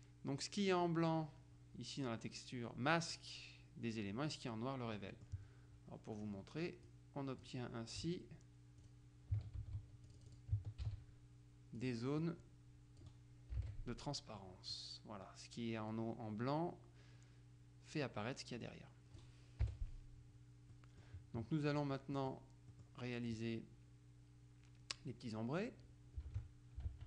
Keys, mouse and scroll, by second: 5.1 click, 6.2 click, 7.0-8.0 drag, 8.9 click, 9.7 ctrl+x, 10.2 ctrl+click, 10.9 ctrl+v, 11.9 click, 13.6 End, 14.8-19.8 drag, 19.7 Delete, 20.8 click, 22.2 click, 26.4 alt+Tab.